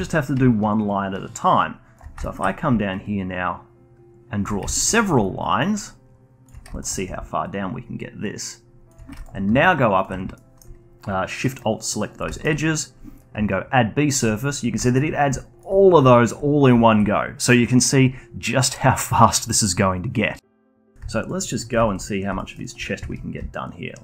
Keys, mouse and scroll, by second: 0.4 d, 0.8-2.2 drag, 2.2 alt+middle click, 2.7 d, 3.0-4.6 drag, 4.6 alt+middle click, 5.1 d, 5.4-6.4 drag, 6.4 d, 6.7 alt+click, 7.1 d, 7.4-8.9 drag, 8.9 d, 9.1 alt+click, 10.3-14.1 alt+middle drag, 14.1 click, 14.6 scroll down 2, 14.8-19.9 alt+drag, 20.8 middle click, 21.1 alt+click, 21.4-21.8 alt+middle drag, 21.8 alt+click, 22.3 alt+middle drag, 22.6 alt+click, 22.9-23.3 scroll up 1, 23.3 d, 23.6 click.